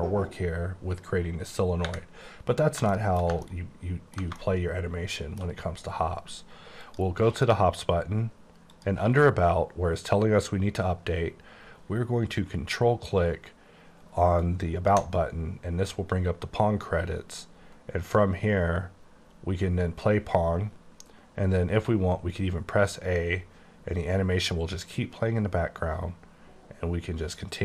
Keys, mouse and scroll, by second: 2.4-2.9 scroll up 1, 3.0 middle click, 6.9 click, 8.8 click, 14.5 ctrl+click, 16.4-19.2 scroll up 21, 19.2-20.7 scroll up 10, 21.8 a, 23.2-24.3 scroll up 8.